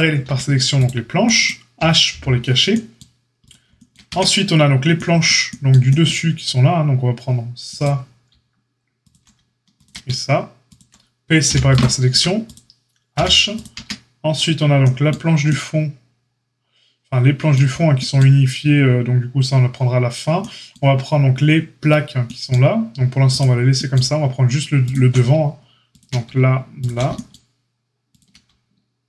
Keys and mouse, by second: 0.2 Tab, 2.1 h, 3.3 click, 3.4-10.6 shift+middle drag, 4.0 Tab, 10.6 ctrl+click, 10.7-12.4 ctrl+middle drag, 11.4 p, 12.1 Tab, 12.4 click, 12.5-13.5 middle drag, 13.1 h, 13.5 click, 13.6-26.7 middle drag, 13.7 Tab, 23.3-24.0 drag, 26.7 ctrl+click, 26.9-28.1 shift+middle drag, 28.1 shift+click, 28.2-29.0 ctrl+middle drag.